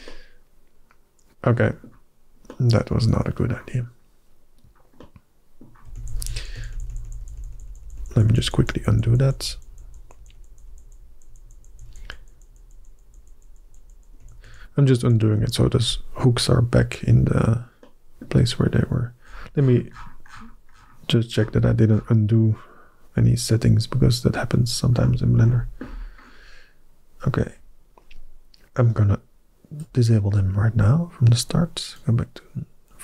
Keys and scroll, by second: 6.0 ctrl+z, 6.2 ctrl+z, 6.4 ctrl+z, 6.6 ctrl+z, 6.7 ctrl+z, 6.9 ctrl+z, 7.1 ctrl+z, 7.2 ctrl+z, 7.4 ctrl+z, 7.5 ctrl+z, 7.7 ctrl+z, 7.8 ctrl+z, 8.0 ctrl+z, 8.1 ctrl+z, 8.3 ctrl+z, 8.4 ctrl+z, 8.6 ctrl+z, 8.8 ctrl+z, 8.9 ctrl+z, 9.1 ctrl+z, 9.2 ctrl+z, 9.4 ctrl+z, 9.5 ctrl+z, 9.7 ctrl+z, 9.9 ctrl+z, 10.0 ctrl+z, 10.2 ctrl+z, 10.3 ctrl+z, 10.5 ctrl+z, 10.7 ctrl+z, 10.8 ctrl+z, 11.0 ctrl+z, 11.1 ctrl+z, 11.3 ctrl+z, 11.4 ctrl+z, 11.6 ctrl+z, 11.7 ctrl+z, 11.9 ctrl+z, 12.0 ctrl+z, 12.2 ctrl+z, 12.3 ctrl+z, 12.5 ctrl+z, 12.6 ctrl+z, 12.9 ctrl+z, 13.1 ctrl+z, 13.2 ctrl+z, 13.3 ctrl+z, 13.5 ctrl+z, 13.7 ctrl+z, 14.0 ctrl+z, 14.3 ctrl+z, 14.8 ctrl+z, 15.2 ctrl+z.